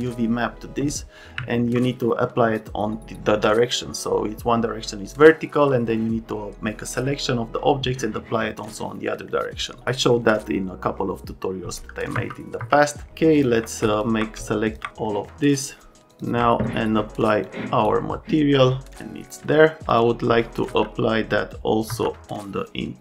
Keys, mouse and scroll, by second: 12.1 F3, 17.4 click, 20.7 F3, 21.9 F2.